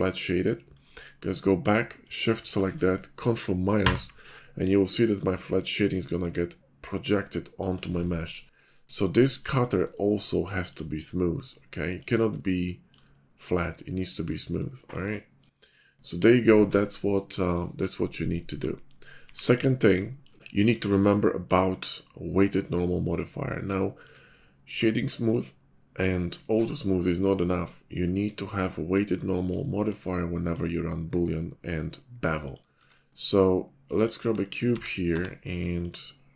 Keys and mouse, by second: 0.7 /, 3.8 ctrl+KP_Subtract, 9.4 click, 11.9 middle click, 12.7-13.0 shift+middle drag, 13.1-13.7 middle drag, 19.2 x, 23.8 shift+middle drag, 28.5-29.0 shift+middle drag, 29.2-29.5 middle drag, 30.5 middle click, 32.9 shift+a, 34.7 s.